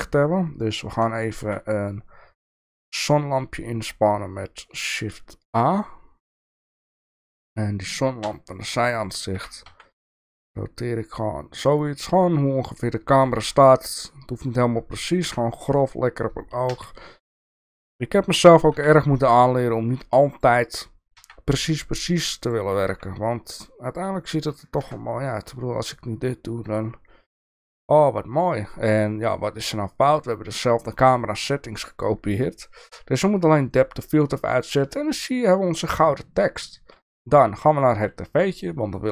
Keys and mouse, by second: 1.4 shift+a, 8.2 KP_3, 9.3 r, 13.4 g, 15.2 KP_7, 16.7 g, 18.4 r, 21.1 g, 22.9 r, 24.8 KP_0, 26.7 click, 27.6 click, 30.1 click, 33.7 drag, 34.6 click, 38.0 click.